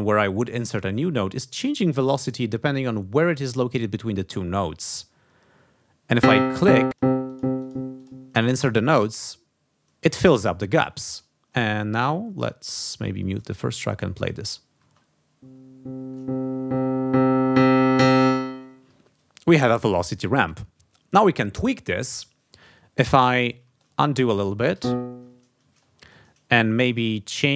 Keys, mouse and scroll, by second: 6.1 click, 6.5 click, 6.9 shift+click, 7.3 shift+click, 8.0 shift+click, 12.7 click, 13.4 click, 14.8 space, 18.2 space, 23.6 ctrl+z, 26.8-27.5 drag.